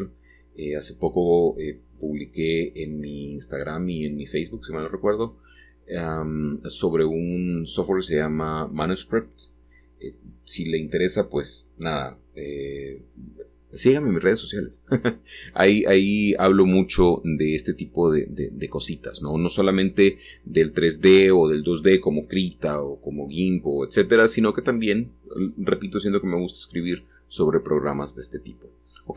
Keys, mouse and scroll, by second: 0.0 r, 3.7 scroll down 2, 4.1-11.2 middle drag, 11.2 scroll up 1, 11.4 middle click, 11.4-11.8 scroll down 3, 11.6-12.7 middle drag, 13.0 a, 13.9-15.8 shift+drag, 16.2 h, 18.7 middle click, 18.7-19.2 scroll up 4, 21.5-24.6 middle drag, 24.6 shift+a, 27.3 click, 28.6 g.